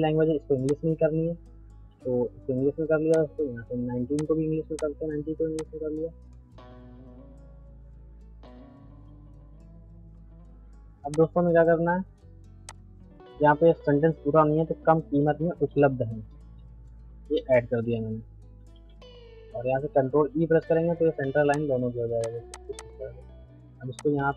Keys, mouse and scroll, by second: 3.1 click, 9.0 ctrl+a, 11.1 click, 13.3 space, 15.1-19.2 typing, 20.3 ctrl+e, 21.5 click, 22.4 c, 22.6-24.0 drag, 24.0-24.3 shift+drag.